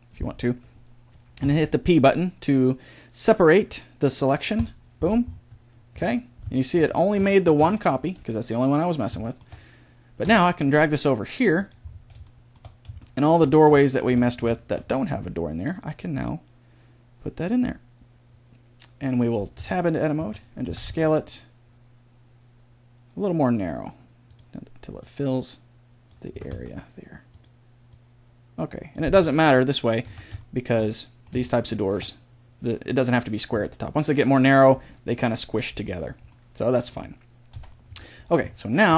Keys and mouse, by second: 1.4 p, 5.9 Tab, 7.6 a, 7.9 right click, 8.1 g, 10.2 g, 13.4 middle click, 13.8 middle click, 15.0 g, 19.6 Tab, 20.2 a, 20.6 s, 25.0-26.5 drag, 26.3 s, 29.1 Tab, 30.0 z, 37.5 KP_7, 37.9 z.